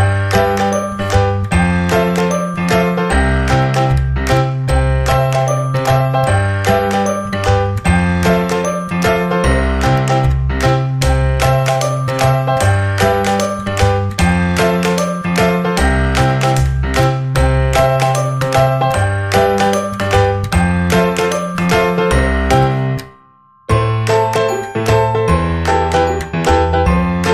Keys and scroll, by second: 5.9 ctrl+z.